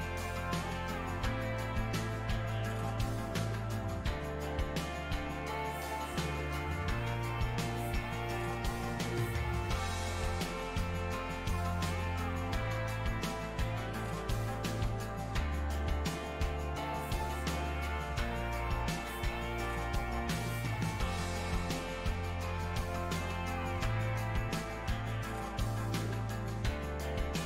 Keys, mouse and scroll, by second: 1.0 shift+c, 1.5-4.6 drag, 4.6 middle click, 5.3 click, 6.2-7.6 middle drag, 7.6 space, 8.1 f, 8.7-11.5 drag, 11.5 middle click, 12.1-15.1 drag, 16.0-21.4 middle drag, 21.4 n, 23.4 m, 24.1 f, 25.0-27.0 drag, 27.0-27.4 middle drag.